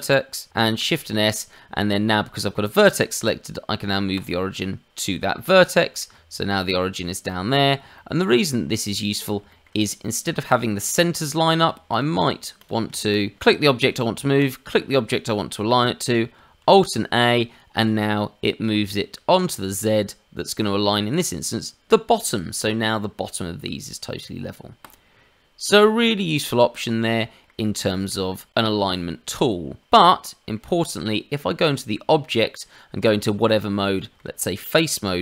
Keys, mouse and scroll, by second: 0.5 shift+s, 5.3 middle click, 6.1 Tab, 7.0 middle click, 7.5-7.8 scroll down 2, 7.9 shift+middle click, 8.8 click, 9.4 shift+middle click, 9.8 click, 11.9 shift+click, 12.5 click, 13.1 shift+click, 14.3 shift+click, 16.6 alt+a, 24.8 click, 27.0 middle click, 27.8 shift+middle click, 29.8 click, 30.0 middle click, 30.8 click, 31.7 Tab, 33.4-33.8 scroll up 1, 33.9 shift+middle click.